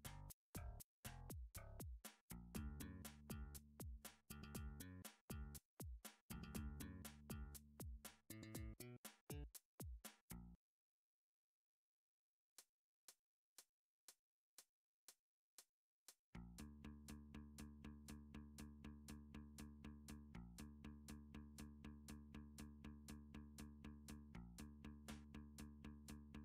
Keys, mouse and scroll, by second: 0.6-1.0 scroll, 2.3 g, 3.3 x, 4.0 click, 4.2 Tab, 6.1 click, 7.6 click, 8.6 s, 8.9 x, 10.7 right click, 11.6 click, 12.9 click, 13.5 s, 13.6 x, 15.5 click, 16.0 s, 16.1 click, 17.0 shift+click, 19.2 s, 20.7 y, 23.0 click, 23.3 g, 23.7 z, 24.6 right click, 25.2 g, 25.4 y, 26.2 click.